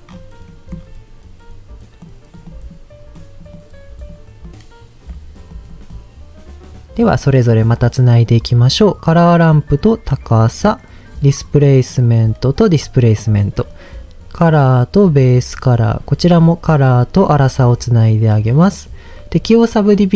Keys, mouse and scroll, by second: 0.1 scroll up 2, 0.5 middle click, 0.7-1.5 scroll up 1, 1.5-1.8 scroll up 1, 2.0-2.3 drag, 2.4 click, 3.1 click, 3.5-4.1 drag, 4.4 click, 5.5 drag, 5.9-7.0 drag, 7.5 middle click, 9.1 click, 9.3 click, 10.4 middle click, 11.9 click, 13.3 middle click, 14.4 click, 16.4-17.5 drag.